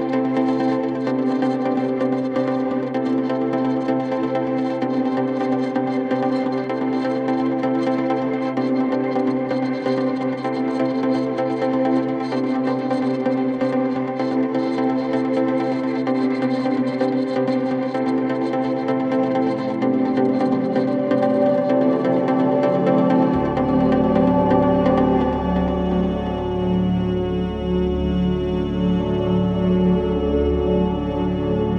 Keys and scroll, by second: 1.8 e, 2.0 y, 2.1 e, 2.2 Return, 6.3 4, 7.4 3, 8.7 ctrl+d, 8.8 Escape, 14.4 4, 18.0 2, 20.3 ], 20.7 [, 21.4 [, 21.7 ], 22.8 4, 25.2 3, 28.7 ].